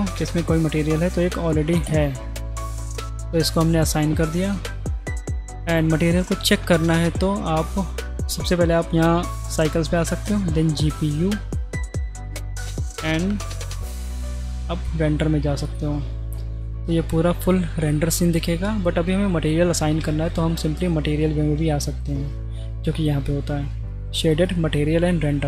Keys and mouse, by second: 10.4-10.9 drag, 11.3-12.3 drag, 13.7 z, 14.6 z, 20.2 z, 21.6 z, 23.9-24.5 drag.